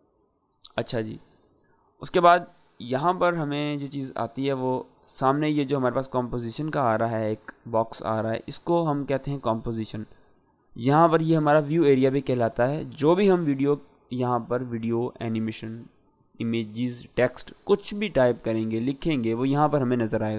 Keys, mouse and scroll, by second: 4.9 click.